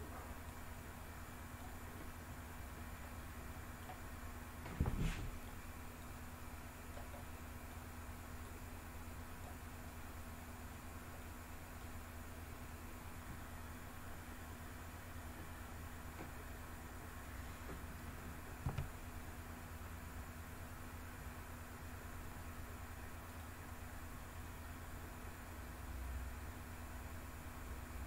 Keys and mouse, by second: 0.4-1.5 drag, 3.1-3.7 middle drag, 5.9 click, 7.0 middle click, 8.3-9.3 drag, 9.9-10.6 middle drag, 11.0-11.7 middle drag, 18.5 g, 23.1 click.